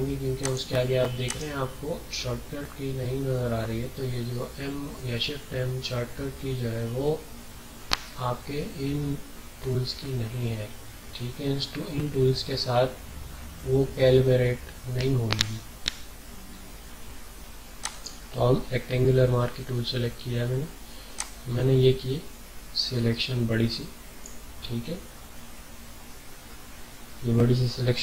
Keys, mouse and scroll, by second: 0.4 click, 1.2 right click, 17.8 click, 21.1-25.7 drag, 25.7 scroll down 1.